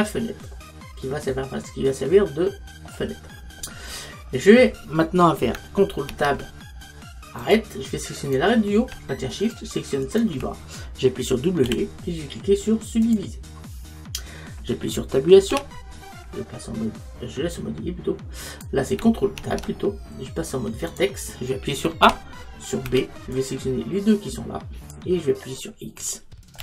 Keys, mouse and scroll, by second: 3.4-6.0 middle drag, 4.1-5.3 scroll down 1, 5.3 scroll down 1, 6.1 ctrl+Tab, 8.3-13.2 right drag, 11.7 w, 15.6 Tab, 19.4 ctrl+Tab, 22.1 a, 22.9 b.